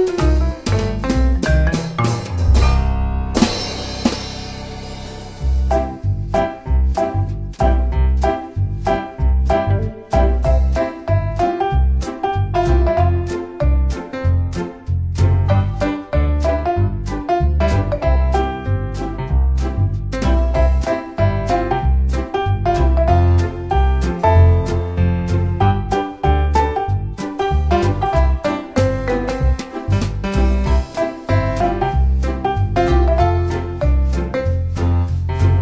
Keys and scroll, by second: 27.3 d, 34.3 Down, 34.5 Down, 34.7 Down.